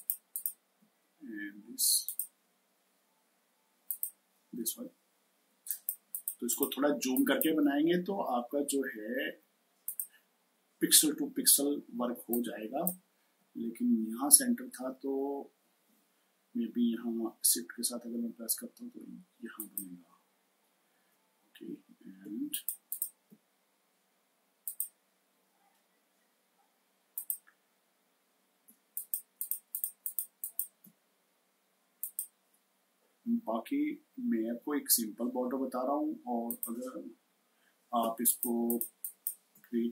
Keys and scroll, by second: 5.3 space, 12.0 space, 22.0 space, 37.9 space.